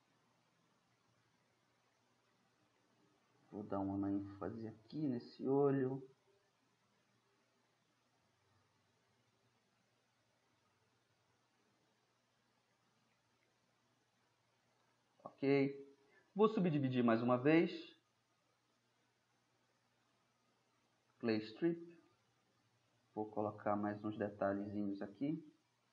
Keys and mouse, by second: 0.1-1.6 middle drag, 2.9-3.7 middle drag, 3.7-9.4 drag, 10.1-13.1 drag, 13.1 middle drag, 13.3 drag, 13.4-14.3 middle drag, 17.3-17.7 middle drag, 17.7-18.7 drag, 18.7-20.8 middle drag, 21.9-22.4 drag, 22.4-24.4 middle drag.